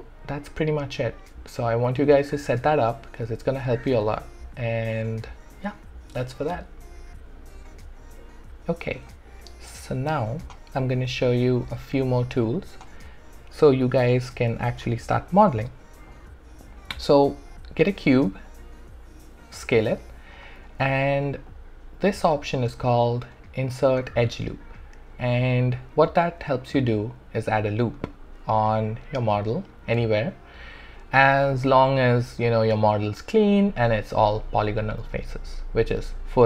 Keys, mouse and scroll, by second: 2.5-5.9 alt+right drag, 7.6-14.7 alt+drag, 14.7 shift+right click, 17.8 r, 18.5-19.8 drag, 19.8 alt+click, 20.7 w, 21.5-36.4 alt+drag.